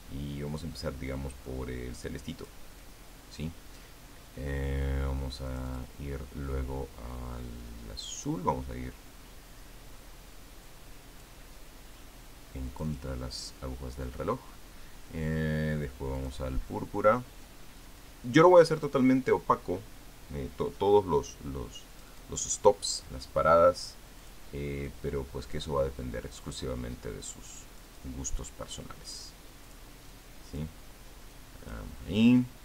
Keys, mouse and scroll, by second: 2.3-3.5 drag, 3.6 click, 6.3 click, 9.0 click, 11.5 click, 13.5 click, 17.0 click, 18.8 click, 22.7 click, 25.0 click, 25.7 click, 28.5 click, 30.5 click, 30.9 click, 32.1 click.